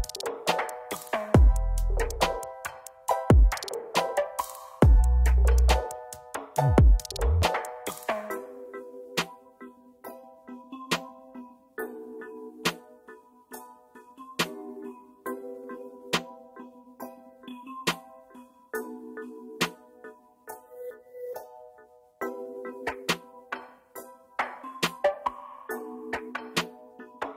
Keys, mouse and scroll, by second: 3.0 Down, 3.2 Down, 4.2 Down, 4.8 Right, 5.0 Right, 7.1 right click, 20.7 double click, 24.7 click, 25.3 click, 25.7 click, 25.9 click, 26.1 click.